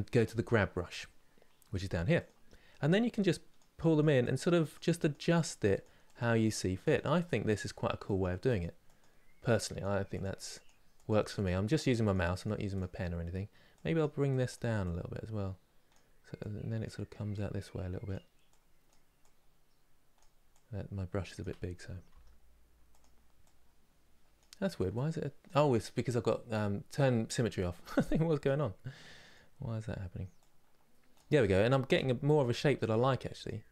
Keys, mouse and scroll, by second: 1.8 click, 2.9-21.8 drag, 21.8 f, 23.1-27.0 drag, 28.1-31.6 drag, 31.6 f, 32.6-33.7 drag.